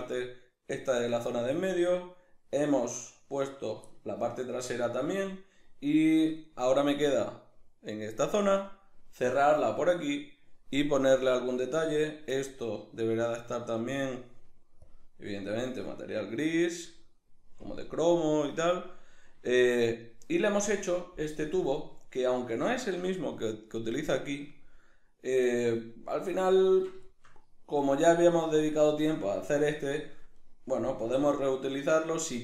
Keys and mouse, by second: 3.6 right drag, 3.9-12.0 shift+middle drag, 12.0 right click, 13.2 drag, 14.0 click, 16.2-20.8 middle drag, 20.8 right click, 21.4 KP_Decimal, 21.8 middle click, 22.8 shift+middle click, 23.4 middle click, 26.6 ctrl+middle click, 27.0 shift+middle click, 27.7 right click, 30.4 right click, 31.0 KP_Decimal, 31.5 middle click, 32.2 shift+middle click.